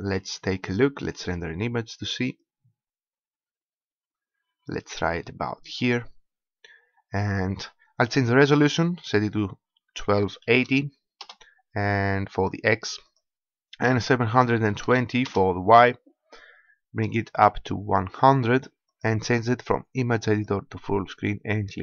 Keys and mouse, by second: 7.8-11.0 drag, 12.8-14.7 drag, 16.2-18.0 drag, 18.7-21.8 drag.